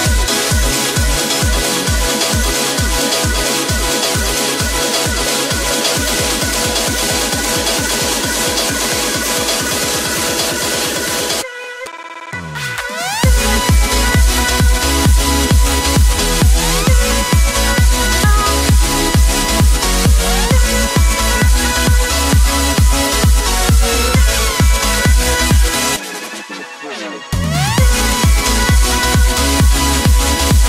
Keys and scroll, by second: 0.8 ctrl+t.